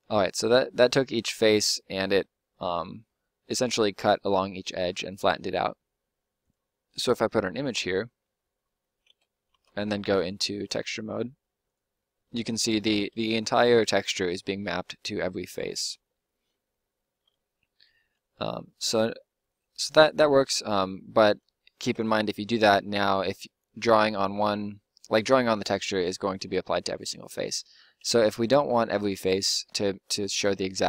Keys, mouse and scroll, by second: 8.1 middle click, 9.0 Tab, 9.5 Tab, 10.2-12.6 middle drag, 21.8 Tab, 26.9 Tab, 27.9 u, 30.4 u.